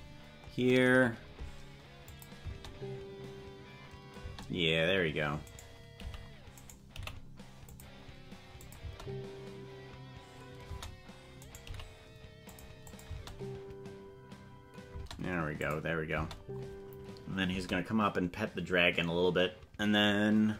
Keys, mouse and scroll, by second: 2.1 click, 2.4 space, 5.4 right click, 5.9 g, 6.6 right click, 6.9 g, 8.7 click, 8.8 space, 11.4 right click, 11.6 g, 12.9 click, 13.1 space, 15.6 click, 16.1 space.